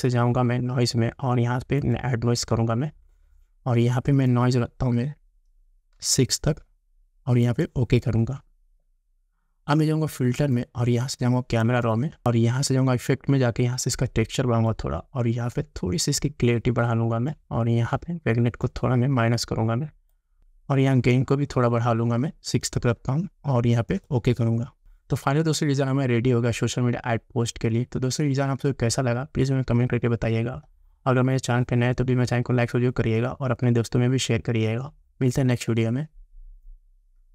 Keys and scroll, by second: 6.0 6.